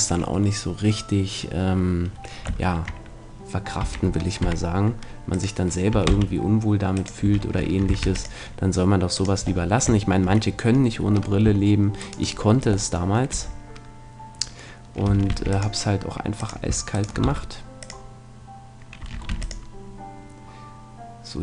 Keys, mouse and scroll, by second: 2.6-4.4 middle drag, 3.8 s, 5.4-8.8 drag, 5.9 s, 7.2 a, 8.0 ctrl+r, 9.3 click, 9.5 middle click, 10.2 click, 10.3 middle click, 10.4 click, 12.0-13.7 right drag, 13.3 f, 15.3 ctrl+r, 16.5-18.3 drag, 16.9-18.8 right drag, 17.2 x, 19.3 ctrl+r.